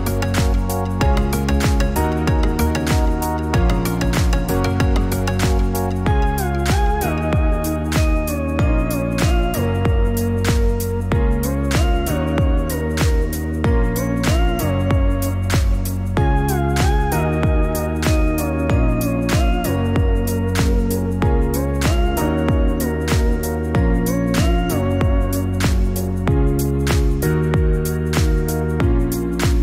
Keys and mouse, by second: 7.2 click, 11.2 Tab, 13.0 click, 17.3 click, 21.4 click, 24.8 Tab, 27.0 a, 28.9 click.